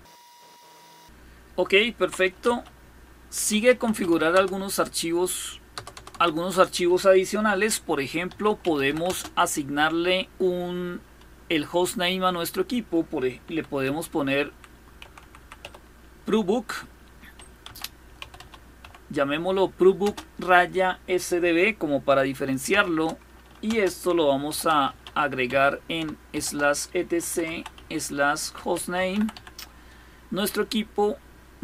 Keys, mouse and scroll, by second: 0.0 click, 2.1-4.1 typing, 5.4 Return, 5.6 Return, 5.8 Return, 7.6-9.0 typing, 12.8-15.7 typing, 17.1-19.7 typing, 22.3 typing, 23.3-29.5 typing.